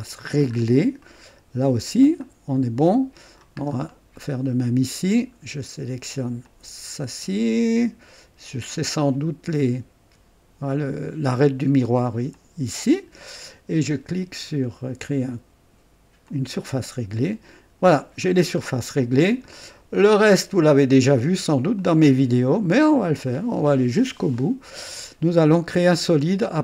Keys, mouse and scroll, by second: 0.4-0.8 scroll up 1, 1.0 right click, 2.2-3.6 drag, 3.6-4.0 scroll down 2, 4.2 right click, 6.4 click, 12.3 ctrl+click, 16.2 click, 17.0-17.5 scroll up 2, 17.9-18.8 scroll down 4, 19.0 click, 19.5-20.9 drag, 21.2 right click, 21.8 click, 22.8 scroll up 1, 23.3 right click, 24.3-26.6 drag.